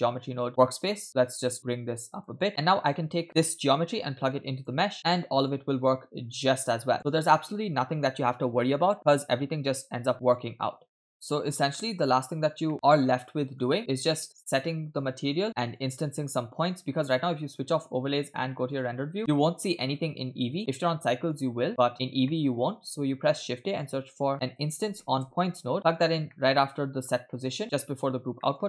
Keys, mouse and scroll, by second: 0.5-0.9 scroll down 4, 0.9 middle click, 1.5 click, 2.5-3.0 drag, 3.2 scroll up 2, 3.5-4.8 drag, 5.5-7.0 drag, 7.0 space, 11.1 click, 11.1 middle click, 12.1-12.7 scroll down 3, 13.1 middle click, 13.1-13.6 scroll down 2, 13.8 middle click, 14.3 scroll up 2, 14.5 middle click, 15.3 scroll up 2, 15.4 click, 17.6 click, 19.5 click, 19.6-21.3 shift+middle drag, 21.4 drag, 21.9 scroll up 3, 22.3 middle click, 22.8 shift+a, 26.3 middle click, 27.0 scroll down 2, 27.3 middle click, 28.4 middle click.